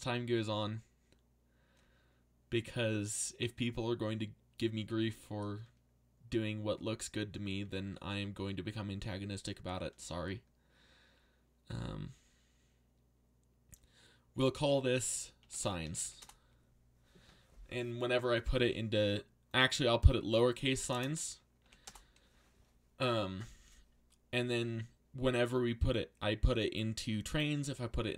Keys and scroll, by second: 15.1-16.5 typing, 20.9 BackSpace, 21.6 s, 21.8 Return.